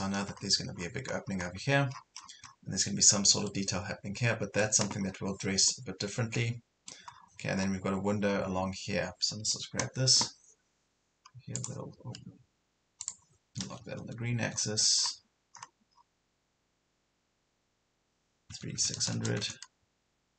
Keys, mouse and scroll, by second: 0.8 scroll up 1, 2.0 scroll down 1, 3.5 middle click, 5.1 scroll down 1, 5.7 middle click, 7.2-7.5 scroll down 1, 7.5 scroll up 1, 8.5 scroll down 1, 9.3 scroll up 1, 11.6 click, 14.0 right click, 14.5 click, 17.2 scroll up 1, 18.5 KP_3, 18.8 KP_6.